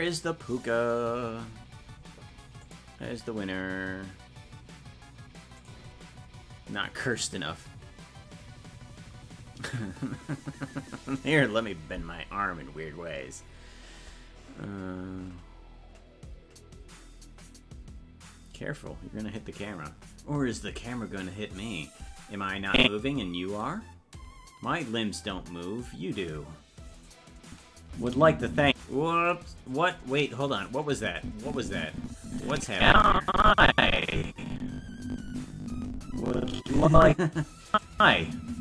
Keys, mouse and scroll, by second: 22.7 click, 27.5 click, 27.9 space, 29.3 space, 31.0-37.1 drag, 37.7 click, 37.9 space.